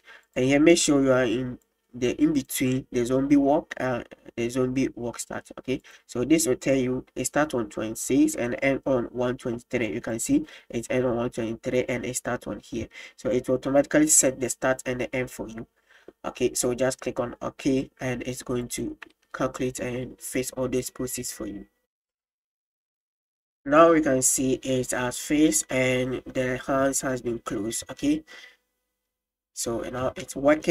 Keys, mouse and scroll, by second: 1.7-9.8 drag, 10.2 click, 14.0-22.1 drag, 23.8-24.3 middle drag, 26.9 middle drag, 27.9 space, 30.0 space.